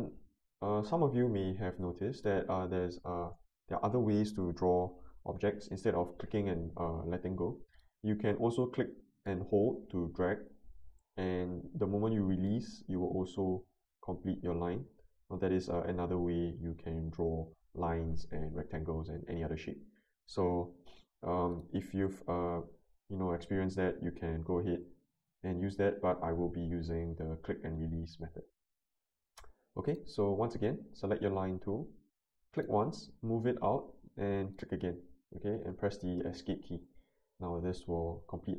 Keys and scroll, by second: 3.2 Delete, 22.8 Escape, 28.5 ctrl+z, 36.2 Escape.